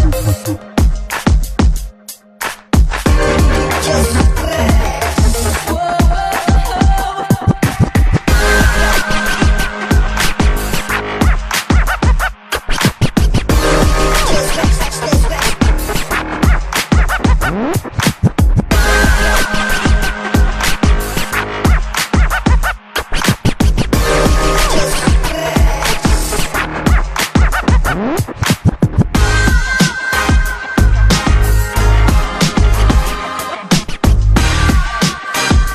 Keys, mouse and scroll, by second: 1.9 click, 2.9 click.